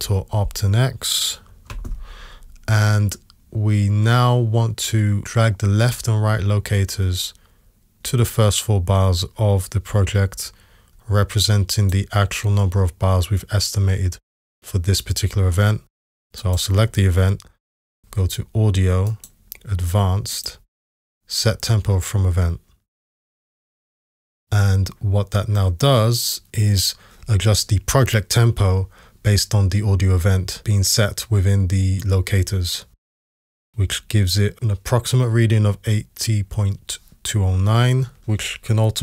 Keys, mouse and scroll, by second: 1.7 alt+x, 19.1-20.5 drag.